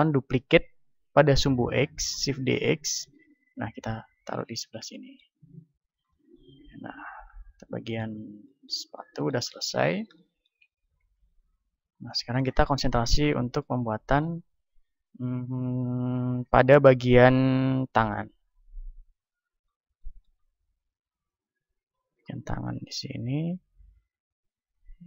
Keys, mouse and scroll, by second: 2.3 shift+d, 4.6-6.2 drag, 5.5 a, 6.2 middle click, 7.9 middle click, 11.4 KP_1, 13.4-18.4 middle drag, 18.4-20.2 drag, 21.1 click, 21.7-25.0 middle drag.